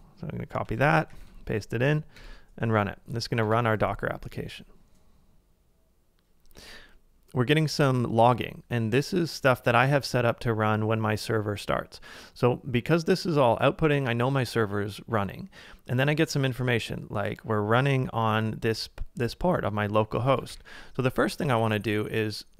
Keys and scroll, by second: 0.8 super+c, 1.3 super+v, 2.2 Return, 3.5 Return, 20.3-21.1 typing, 21.5 ctrl+a.